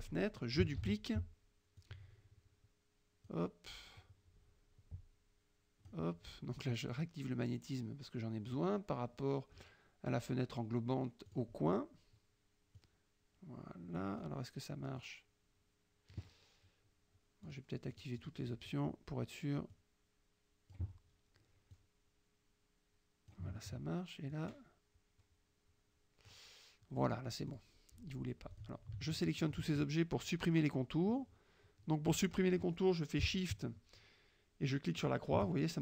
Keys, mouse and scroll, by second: 0.8 ctrl+d, 1.9-3.5 drag, 4.1-6.2 drag, 7.0 click, 8.6 click, 11.4 click, 12.9 click, 15.0-16.3 drag, 17.5 click, 18.0 click, 19.8-21.0 drag, 21.8-23.6 drag, 24.4-26.5 drag, 27.6 click, 28.6 click, 29.2-29.7 shift+drag, 35.0 shift+click.